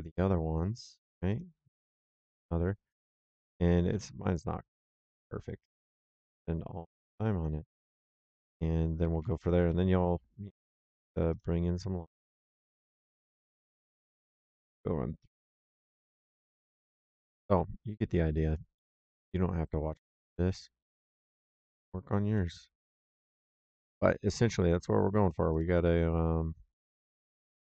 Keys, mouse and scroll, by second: 1.2 click, 1.8 c, 3.8 c, 5.0 click, 8.3 click, 8.9 Escape, 10.8 l, 11.2 click, 12.6 click, 18.4 click, 18.9 l, 20.2 click, 21.5 click, 22.1 l, 23.9 middle click, 25.4 click, 26.7 click.